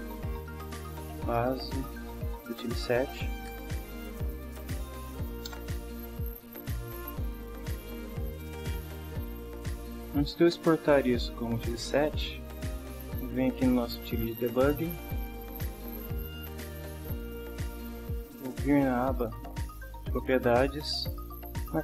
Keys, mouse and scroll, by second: 0.0-1.8 typing, 2.8-4.9 typing, 5.4 Return, 8.6-9.2 middle drag, 9.2 scroll up 1, 12.8 drag, 13.6-14.0 drag.